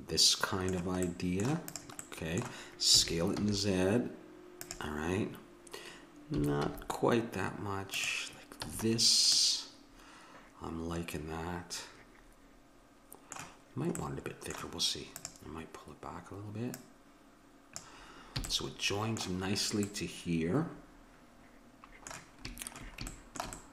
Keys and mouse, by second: 1.7-3.6 drag, 2.9 s, 6.4 s, 8.6 a, 9.0-11.1 middle drag, 14.2 middle click, 15.1-18.6 drag, 18.4 a.